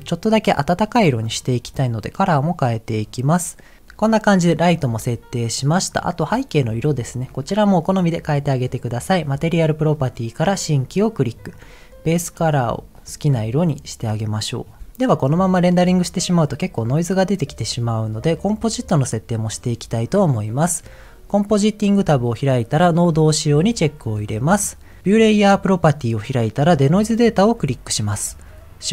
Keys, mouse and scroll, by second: 1.4 click, 5.9 click, 9.5 click, 10.5 click, 11.5 click, 20.4 click, 23.1 click, 24.0 scroll down 2, 24.4 middle click, 25.2-26.2 drag, 27.2-28.4 drag.